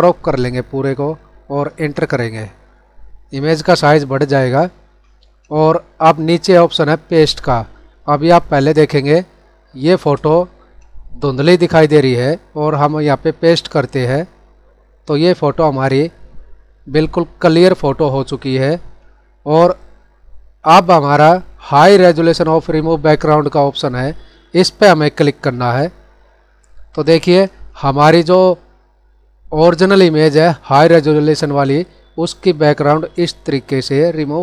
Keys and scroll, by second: 4.2 ctrl+0, 8.2 ctrl+=, 9.1 space.